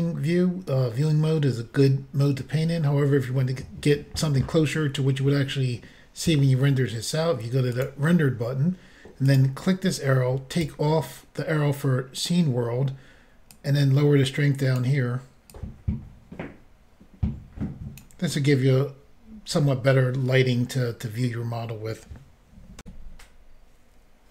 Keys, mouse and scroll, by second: 7.8 click, 7.9 click, 9.3 click, 10.6 click, 10.6 click, 13.5 click, 15.6 click, 22.8 Insert.